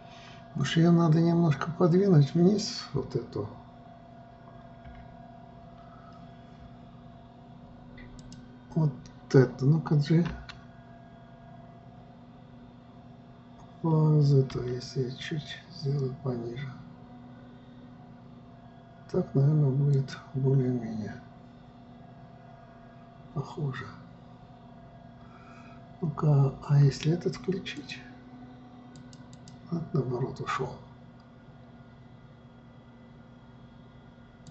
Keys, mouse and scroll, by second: 5.5 KP_3, 8.7 click, 10.9 g, 28.3 click, 29.5 click, 29.9 click.